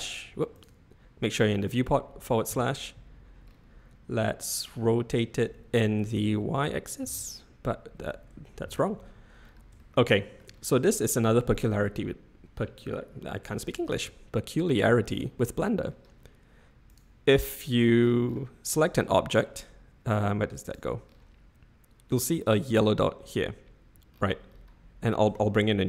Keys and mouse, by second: 2.7 /, 6.1 r, 9.8-10.4 shift+middle drag, 11.8-14.0 middle drag, 17.7-18.3 middle drag, 18.6-19.9 middle drag, 25.3 shift+a.